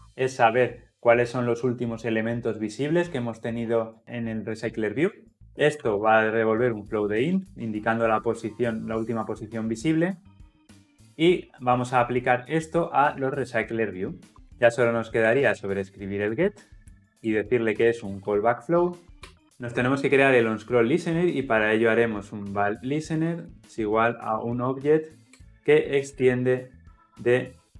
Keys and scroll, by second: 14.3 Return, 14.5 Escape, 15.2 Tab, 17.2 Return, 25.3 Return.